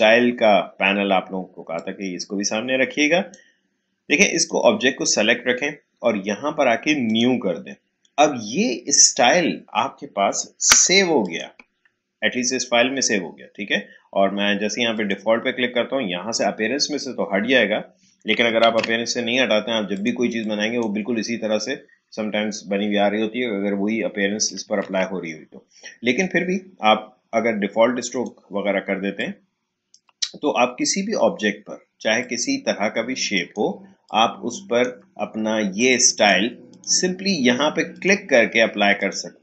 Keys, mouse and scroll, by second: 7.0 click, 10.6 Delete, 11.2 click, 14.9 click, 18.4 click, 18.6 ctrl+z, 19.9-23.3 drag, 24.3 click, 24.6 ctrl+z, 28.1-32.2 drag, 32.2 click, 34.0-35.7 shift+drag.